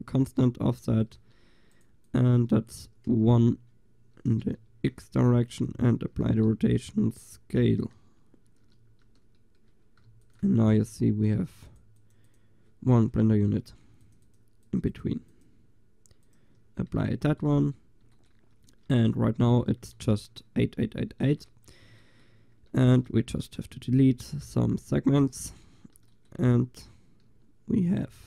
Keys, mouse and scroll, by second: 4.7 ctrl+a, 6.3 ctrl+a, 8.4-10.6 drag, 8.8 ctrl+a, 10.1 ctrl+s, 13.0-16.6 drag, 23.0 Tab, 23.3 a, 24.2 l, 25.1 Delete, 28.1-28.2 typing.